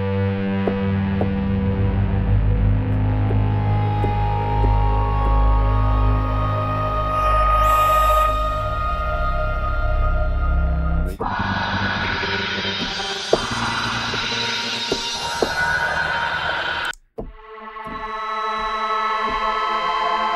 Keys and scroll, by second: 8.2 F5, 19.2 F2.